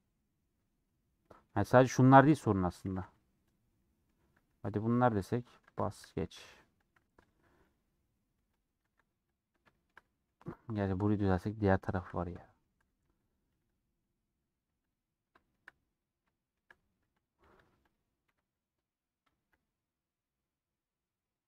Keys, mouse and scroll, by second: 0.8 1, 1.2 middle click, 1.7 2, 3.7 middle click, 4.6 1, 8.4-9.6 drag, 9.6-13.0 shift+middle drag, 13.0 1, 13.1-15.3 drag, 15.3-17.3 shift+middle drag, 17.3 click.